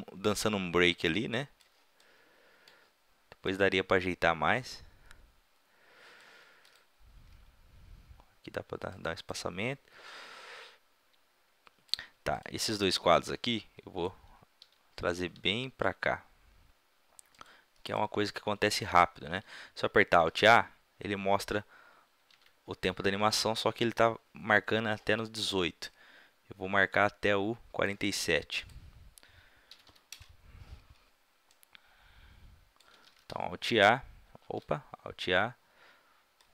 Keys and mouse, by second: 3.5-5.2 drag, 5.2-6.7 middle drag, 6.7-7.2 right drag, 7.2 g, 8.4 middle click, 11.0 click, 11.2 middle click, 12.4 click, 12.6 a, 12.8 b, 14.6 g, 15.4 g, 17.4-18.8 drag, 20.3 alt+a, 22.4 alt+a, 25.9-27.6 drag, 27.6-28.6 middle drag, 28.6 click, 30.3 middle click, 31.6-33.5 drag, 33.2 alt+s, 34.5 alt+a, 36.4-36.5 drag.